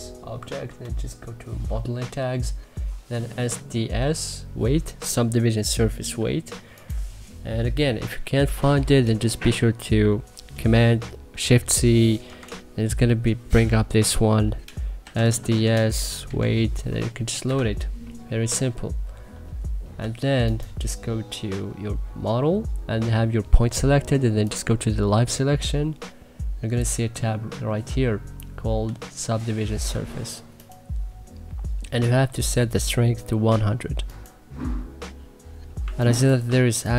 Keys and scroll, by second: 12.2 shift+c, 14.7-16.1 typing, 17.4 Escape, 35.7 1, 36.3 2.